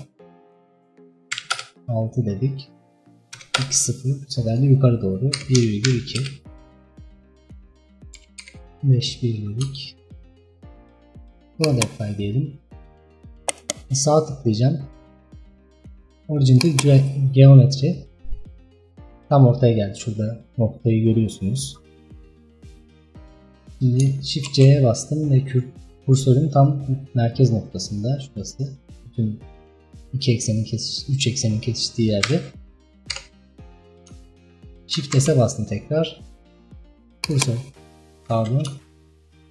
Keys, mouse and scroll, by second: 7.0-8.2 scroll down 3, 8.2 KP_5, 8.4 KP_1, 9.3 scroll up 3, 9.6 scroll down 3, 9.8-10.4 shift+middle drag, 10.4-11.0 scroll up 3, 11.6 click, 12.3-12.6 scroll down 3, 12.6-13.5 scroll up 2, 13.5-16.5 right drag, 19.6-21.0 scroll up 3, 21.8-22.3 scroll down 3, 24.6 shift+c, 27.4-30.3 middle drag, 30.3-30.7 scroll up 2, 30.8-31.7 scroll down 4, 32.3 KP_5, 33.2 KP_1, 33.9-34.4 scroll down 3, 34.4 shift+middle click, 34.8-35.2 scroll up 3, 35.2 shift+s.